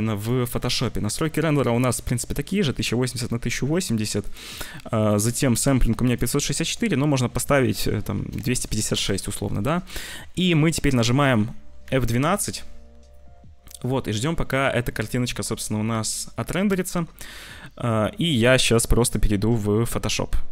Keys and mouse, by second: 0.0 click, 0.6 click, 4.1 click, 4.9 click, 5.9-8.8 drag, 10.6 ctrl+s, 11.9 ctrl+s, 12.4 F12.